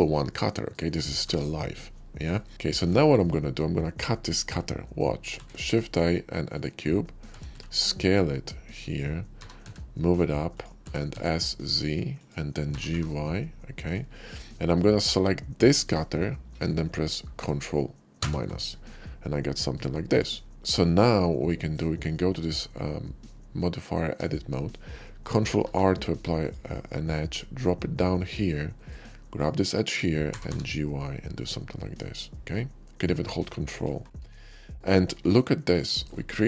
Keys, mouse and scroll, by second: 1.2 g, 2.2 right click, 2.5 middle click, 2.5 x, 2.9 shift+middle drag, 3.2 shift+middle drag, 3.7 shift+click, 4.2 shift+middle click, 4.6 shift+middle click, 5.2 shift+a, 6.4 click, 6.9 scroll down 1, 7.2 s, 7.4 x, 8.8 click, 9.3 g, 9.6 z, 10.3 click, 10.8 s, 11.0 z, 12.1 click, 12.2 s, 12.7 g, 12.9 y, 13.8 click, 13.9-14.6 middle drag, 15.6 shift+click, 18.1 ctrl+KP_Subtract, 19.4 middle drag, 19.7 shift+middle drag, 20.1-21.6 shift+middle drag, 20.5 Tab, 22.4 Tab, 25.5 ctrl+r, 26.3 click, 28.7 middle click, 29.1 click, 30.3 g, 30.5 y, 33.7 ctrl+click, 33.9 Tab, 34.3-35.6 middle drag, 35.7 shift+middle click, 36.2 shift+middle click.